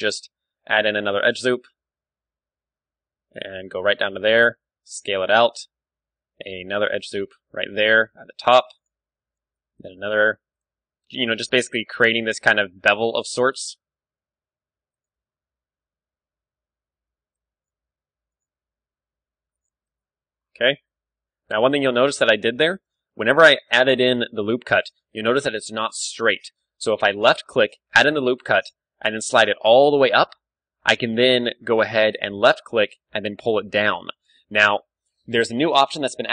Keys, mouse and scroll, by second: 0.5 ctrl+r, 3.9-6.8 drag, 4.2 s, 5.2 z, 6.3 ctrl+r, 8.8-10.4 drag, 9.4 ctrl+r, 10.6-12.3 drag, 10.9 s, 12.5-13.6 drag, 12.6 z, 13.2 ctrl+r, 13.9 s, 14.3 right click, 15.0 click, 15.2 Tab, 15.2 middle click, 15.5 click, 15.8-18.1 middle drag, 16.5 Tab, 16.8 z, 17.2 ctrl+r, 18.4-20.0 drag, 18.5 g, 19.7 z, 19.9 Tab, 20.4 click, 20.9-22.5 middle drag, 21.4 KP_1, 22.1 Tab, 22.5 ctrl+z, 23.1 ctrl+z, 23.9 ctrl+z, 24.4 ctrl+r, 24.4 click, 24.8 middle click, 32.5-34.1 drag, 32.9 g, 34.3-36.1 right drag, 34.6 ctrl+z.